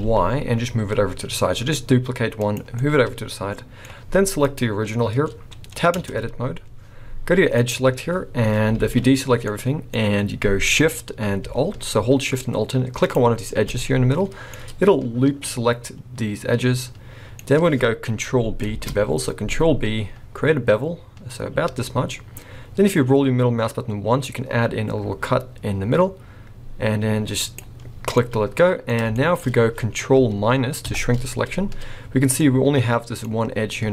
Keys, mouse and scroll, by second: 2.8 middle click, 4.4 click, 4.8-6.0 scroll up 3, 6.0 Tab, 7.6 click, 8.8 alt+a, 9.5 middle click, 13.1 alt+shift+click, 13.8 middle click, 15.4 middle click, 17.4-18.2 scroll up 1, 18.7 ctrl+b, 28.2 middle click, 29.1-30.1 shift+scroll up 4, 29.1 shift+middle click, 30.8 ctrl+KP_Subtract, 32.4 middle click.